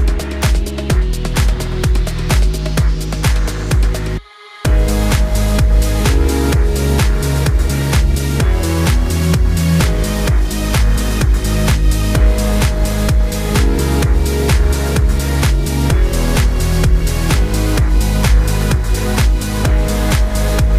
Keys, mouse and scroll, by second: 0.1 g, 1.8 click, 2.0 click, 2.6 click, 2.8-3.1 scroll up 3, 3.1 Tab, 3.2 a, 3.5 a, 3.6 e, 4.2 Tab, 4.6 click, 4.9-5.5 scroll up 9, 5.5 click, 5.7 click, 5.9 g, 7.1-7.4 scroll down 7, 7.4 click, 7.9 scroll down 7, 8.2 Tab, 8.3 scroll up 5, 8.4 click, 8.6-9.1 scroll down 4, 9.1 click, 9.3 click, 9.8 click, 9.9-10.3 scroll up 5, 10.4 click, 11.2 click, 11.4 scroll down 2, 11.8 click, 12.0 Tab, 12.2 drag, 12.4-12.7 scroll up 11, 12.7-13.1 scroll down 9, 13.1-13.7 scroll up 1, 13.7 click, 14.6 h, 15.0 click, 15.4 Tab, 15.5 click, 15.7 Tab, 16.8 shift+click, 17.2 shift+click, 17.4 shift+click, 17.6 shift+click, 18.0 shift+click, 18.6 click, 19.5 alt+h, 20.6-20.7 scroll down 15.